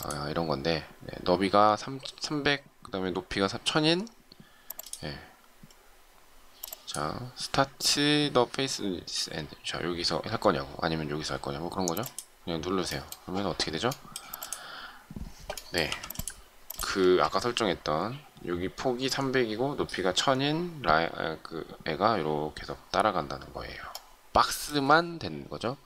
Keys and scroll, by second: 15.9 m, 17.0 space.